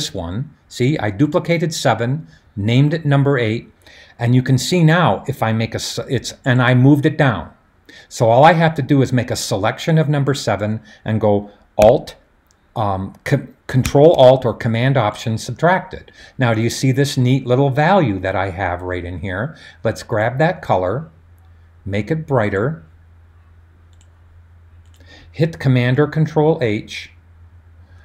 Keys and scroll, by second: 26.0 super+h.